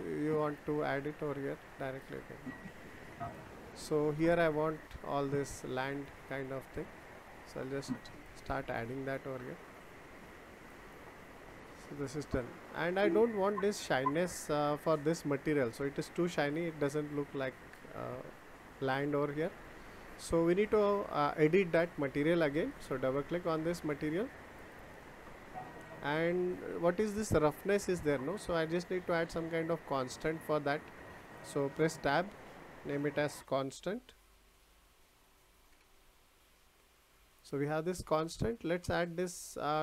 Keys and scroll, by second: 31.9 Tab.